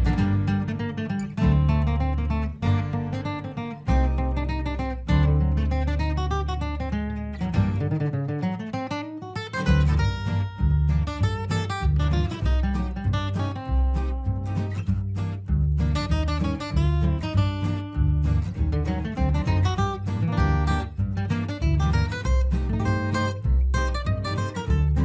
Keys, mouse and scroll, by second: 6.1 shift+Page_Up, 7.1 alt+click, 8.0 ctrl+g, 8.9-14.8 drag, 18.0 click, 18.0 click, 18.4 F4, 19.1-20.8 drag, 20.8 F2, 21.1-25.0 drag.